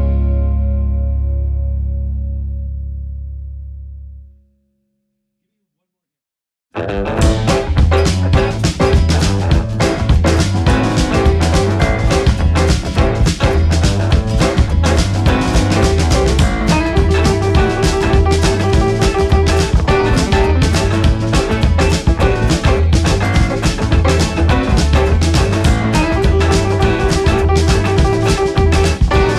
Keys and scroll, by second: 1.5 space, 3.7 ctrl+-, 12.7 Down, 13.3 Up, 18.2 ctrl+=, 22.2 ctrl+=, 24.0 ctrl+0.